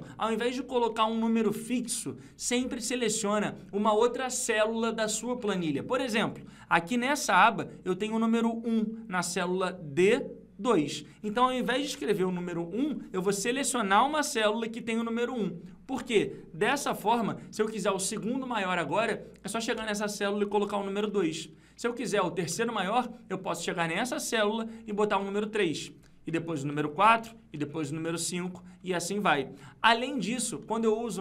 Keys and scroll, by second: 0.3 F2.